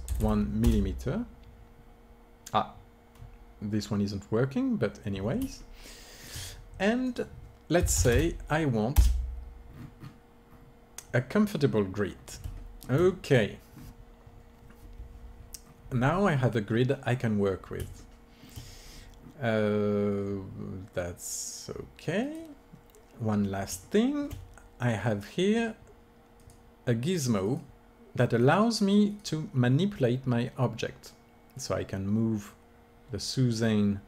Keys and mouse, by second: 0.2 m, 4.8-7.0 middle drag, 7.0-8.9 drag, 8.9 KP_0, 9.6 middle click, 11.9 middle click, 12.7-22.1 middle drag, 22.1-30.8 drag, 31.4-33.4 drag.